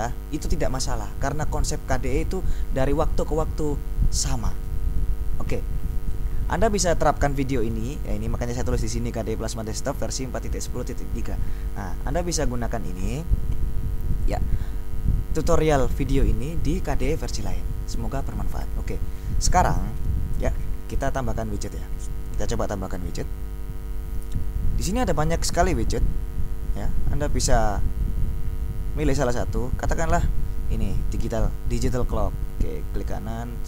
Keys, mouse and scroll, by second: 8.9 click, 9.7-11.5 drag, 11.9 click, 14.4 click, 18.7 click, 21.0 right click, 21.8 click, 25.8-26.5 scroll down 2, 26.8-27.9 scroll down 2, 28.5-29.3 scroll down 2, 29.3-29.8 scroll down 1, 30.1-31.2 scroll down 2, 32.2-33.6 drag.